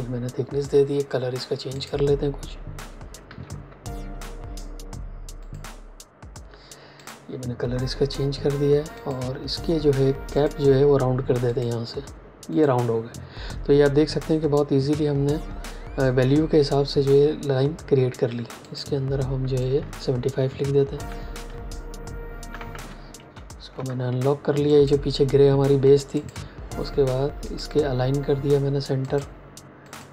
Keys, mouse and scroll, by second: 1.7 click, 3.2 x, 5.3 click, 18.6 click, 23.1 ctrl+alt+2, 24.6 click, 26.1 shift+click, 27.4 click.